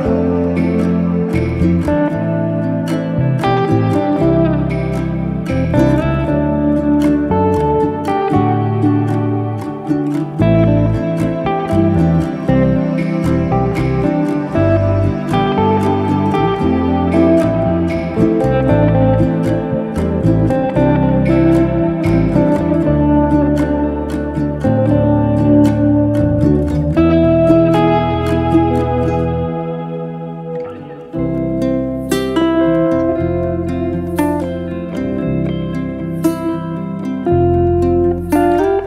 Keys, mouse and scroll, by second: 0.8-1.8 drag, 1.8-2.3 scroll down 4, 2.3-2.9 drag, 2.9-3.3 scroll down 1, 3.3 click, 3.8 drag, 4.0-5.3 scroll down 7, 5.3 click, 7.4-8.1 scroll up 4, 8.4-8.9 scroll up 6, 9.4-10.9 shift+drag, 11.5-12.0 scroll down 2, 13.1 ctrl+1, 13.9-15.0 right drag, 15.0 click, 15.5 click, 16.4 click, 16.9-18.3 drag, 18.7-19.1 scroll up 3, 19.1-20.2 middle drag, 20.2 scroll down 1, 20.4-21.8 middle drag, 21.8 scroll down 1, 22.0-23.5 middle drag, 24.6 scroll down 1, 24.7-26.2 middle drag, 26.2 click, 26.7-27.3 scroll down 2, 27.3-28.9 shift+drag, 30.5 scroll up 2, 30.8 shift+middle click, 31.3-32.0 scroll up 1, 32.0-33.5 shift+drag, 34.4 scroll down 1, 34.6-35.2 middle drag, 35.2 click, 35.5 shift+click, 36.8 ctrl+l, 38.7-38.8 middle drag.